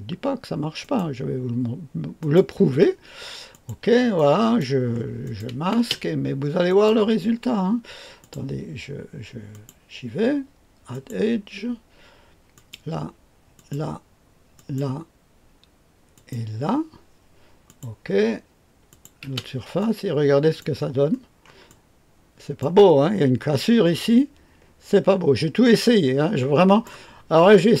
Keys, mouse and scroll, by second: 0.7 click, 2.1 click, 3.4-4.7 drag, 5.2 click, 5.7 space, 6.6 click, 8.1 click, 9.4 click, 10.9 click, 11.1 click, 12.5 click, 13.5 click, 14.5 click, 16.1 click, 17.6 click, 18.8 click, 19.2 space, 19.7 click, 21.0-21.6 scroll up 1, 21.6 click, 23.9-26.8 drag, 27.1-27.8 scroll down 1.